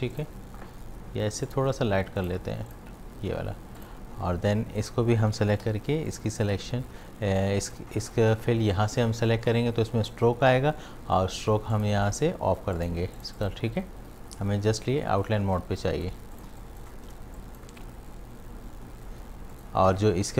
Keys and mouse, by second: 0.1 click, 3.7 v, 3.8 click, 5.6 i, 6.1 click, 6.4 v, 11.7 click, 15.6 space, 15.8 click, 16.1 space, 16.4 ctrl+alt+click, 17.2 space, 17.4 click, 17.7 space.